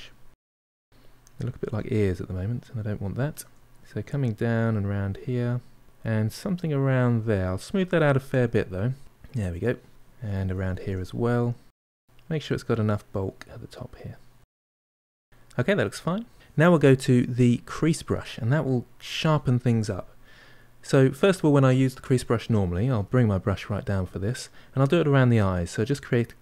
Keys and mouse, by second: 0.4 middle click, 0.8 shift+click, 1.3-3.2 middle drag, 3.2-4.5 drag, 4.5 middle click, 5.0-6.7 drag, 6.9-8.0 middle drag, 8.0 shift+click, 8.7-10.2 middle drag, 10.5 shift+click, 11.2 middle click, 11.9 click, 12.4 middle click, 13.0 click, 13.1 middle click, 13.7 click, 14.1-17.6 middle drag, 17.6 click, 18.1-21.2 middle drag, 22.8 f, 25.6-26.4 drag.